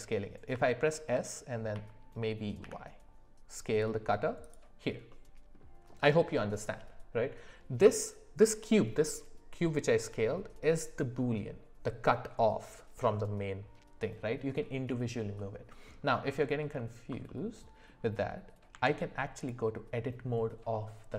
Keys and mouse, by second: 0.5 s, 5.1-5.5 middle drag, 15.4 middle click, 17.2 middle click, 18.7 Tab.